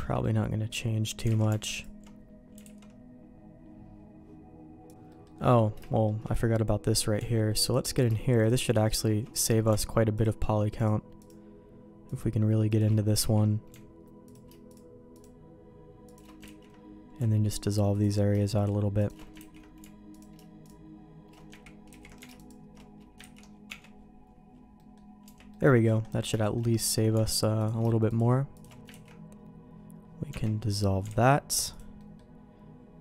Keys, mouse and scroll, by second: 0.2 middle click, 1.3 alt+a, 2.6 alt+a, 5.1 middle click, 5.8 shift+middle click, 7.6 alt+click, 10.7 alt+shift+click, 11.2-12.8 alt+shift+drag, 13.2 ctrl+x, 14.7-16.2 alt+shift+drag, 16.4 ctrl+x, 17.9 alt+click, 19.0 alt+shift+click, 19.4 ctrl+x, 21.9 ctrl+z, 23.3 ctrl+x, 23.6 Tab, 24.7 middle click, 25.2 Tab, 25.5 middle click, 26.4 shift+middle click, 27.6 alt+click, 28.5 alt+shift+click, 28.9 ctrl+x, 30.3 Tab, 31.2 alt+x, 31.7 click, 32.0 middle click.